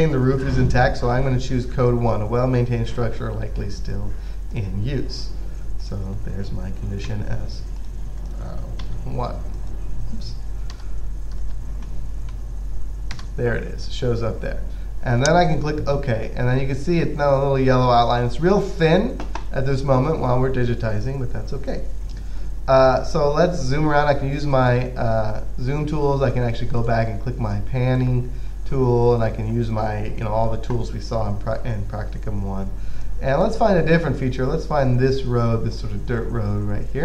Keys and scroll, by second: 7.4 typing, 9.1 typing, 11.0 1, 12.6 s.